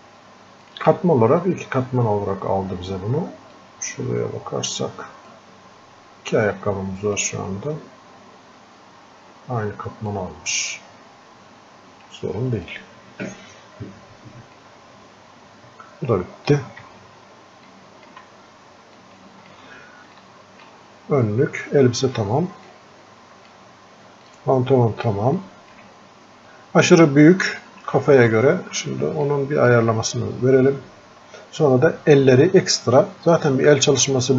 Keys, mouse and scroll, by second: 18.3 f, 19.7 shift+click, 20.5-34.3 alt+drag.